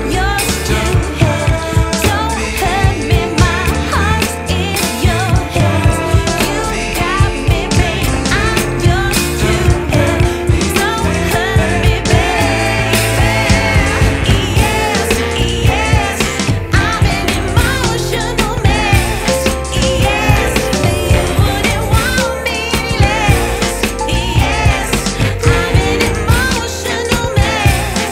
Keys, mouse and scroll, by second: 3.1-4.9 drag, 4.9-6.4 middle drag, 6.4 shift+a, 8.9 middle click, 9.6-10.7 scroll up 6, 10.7 shift+a, 14.4-16.0 drag, 16.0-16.5 scroll up 5, 18.0-28.1 drag.